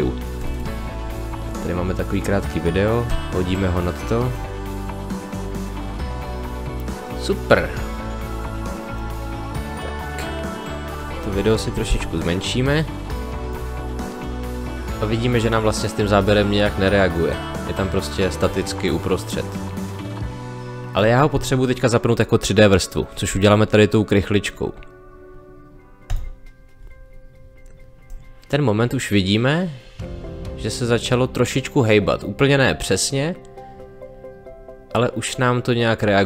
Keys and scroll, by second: 11.9 s.